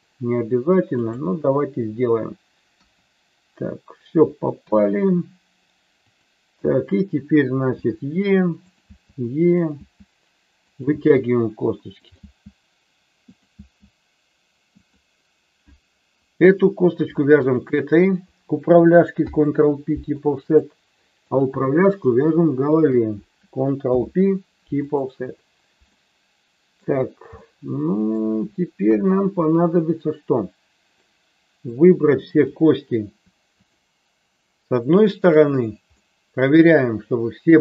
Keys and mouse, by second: 0.9 click, 2.8 KP_1, 4.6 KP_3, 6.1 click, 7.8 e, 8.6 click, 8.8 e, 9.5 click, 9.8 e, 10.6 click, 10.9 e, 11.9 click, 12.2 e, 13.5 e, 17.5 shift+click, 19.1 ctrl+p, 20.4 click, 23.9 ctrl+p, 25.9 middle click, 27.4 middle click, 28.9 KP_1, 31.0-32.5 drag, 33.5 shift+click, 35.0 shift+click, 36.0-37.6 middle drag.